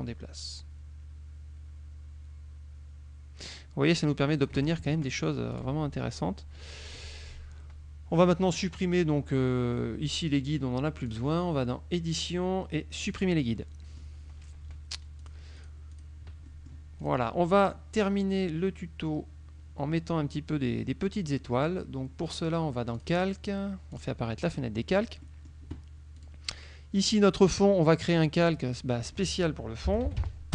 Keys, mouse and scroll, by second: 4.9 ctrl+shift+click, 5.6 click, 6.7 click, 11.2 click, 13.0 click, 13.6 middle click, 15.3 click, 15.7 click, 16.2 click, 16.6 click, 16.8 middle click, 17.1 click, 23.0 click, 24.0 click, 24.6 middle click, 25.3 middle click, 26.2 click, 28.4 click, 29.7-30.5 typing.